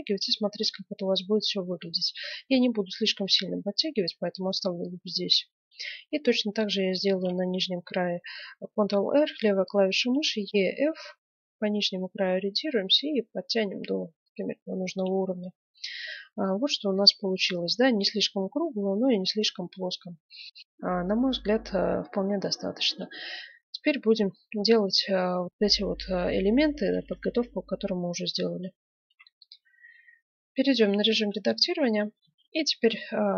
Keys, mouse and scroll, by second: 4.9-7.0 middle drag, 7.1 ctrl+r, 7.3-8.5 middle drag, 14.5-16.0 middle drag, 14.8 Tab, 21.4-23.0 middle drag, 25.5-27.2 middle drag, 27.3 middle click, 29.0 F9, 30.4 Tab, 32.2 ctrl+Tab.